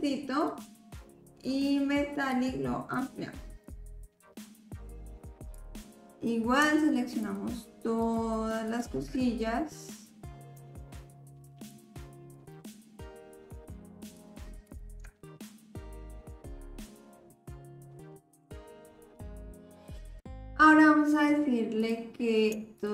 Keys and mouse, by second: 2.3 click, 3.7 click, 5.5 click, 7.3 shift+click, 8.0 shift+click, 8.7 shift+click, 9.2-10.4 drag, 11.7 shift+click, 12.3 shift+click, 14.2 shift+click, 14.7 shift+click, 16.6 shift+click, 18.6 ctrl+l, 21.8 click, 22.8-22.9 shift+drag.